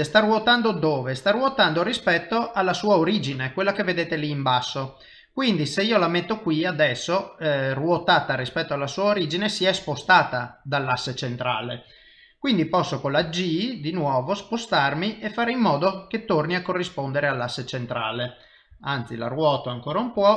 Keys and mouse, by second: 13.2 g, 18.7 r, 20.2 g.